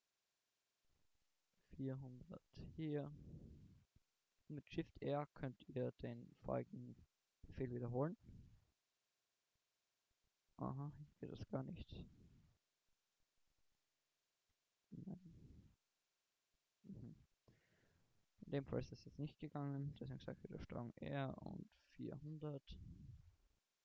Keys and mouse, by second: 0.3 ctrl+r, 3.1 click, 8.5 shift+r, 13.8 a, 15.2 ctrl+z, 15.8 ctrl+z, 16.7 a, 20.5 ctrl+r.